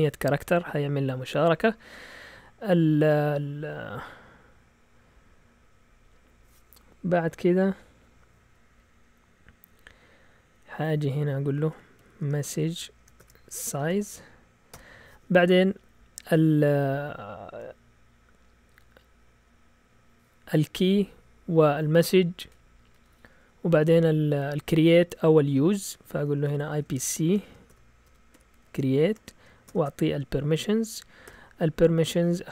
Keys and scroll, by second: 9.7 Down, 9.9 Down, 10.4 Left, 11.4-14.7 typing, 26.4-29.7 typing, 31.3 typing.